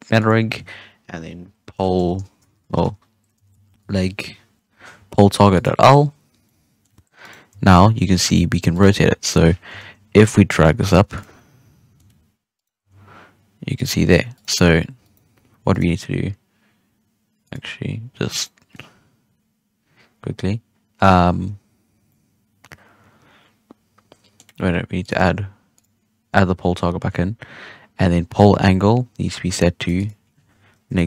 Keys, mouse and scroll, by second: 2.5 BackSpace, 2.6 BackSpace, 6.2 scroll down 1, 6.4-7.2 middle drag, 7.2 right click, 7.5 g, 9.6 KP_3, 10.5 right click, 10.6 g, 11.3-12.5 middle drag, 12.5 right click, 12.7 g, 14.3 right click, 15.0 right click, 15.6 right click, 17.4 click, 18.4-21.4 middle drag, 21.4-22.0 scroll up 3, 22.0-24.9 middle drag, 24.9-28.1 drag, 28.3-31.0 drag.